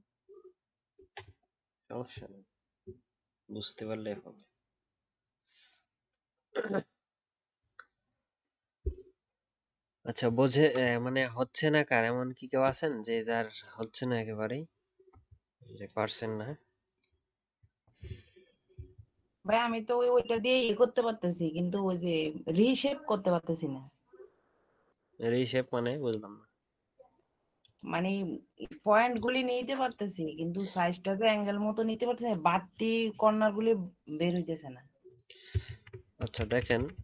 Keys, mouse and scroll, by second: 35.6 ctrl+z, 36.3 ctrl+z, 36.5 ctrl+z, 36.7 ctrl+z, 36.9 ctrl+z.